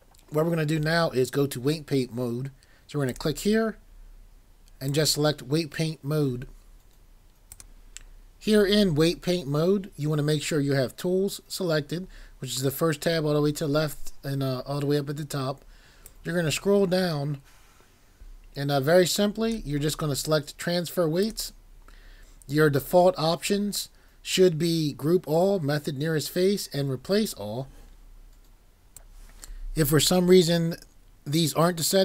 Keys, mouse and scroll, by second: 3.1 click.